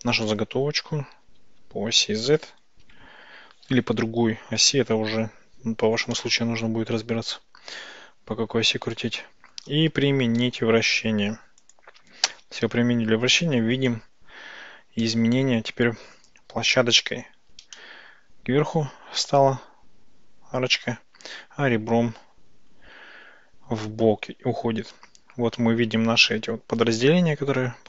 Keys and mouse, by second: 1.2 r, 1.5 z, 2.9 KP_9, 3.0 KP_0, 6.2-9.6 shift+drag, 10.4 ctrl+a, 15.1-16.3 middle drag, 17.8-25.6 middle drag.